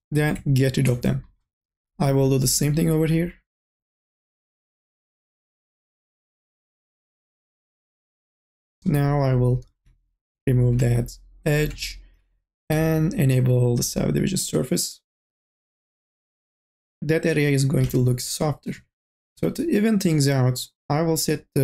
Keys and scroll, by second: 7.0 ctrl+z, 12.6 2, 13.0 e, 14.7 n, 15.6 a, 16.4 a, 18.2 b, 18.8 q.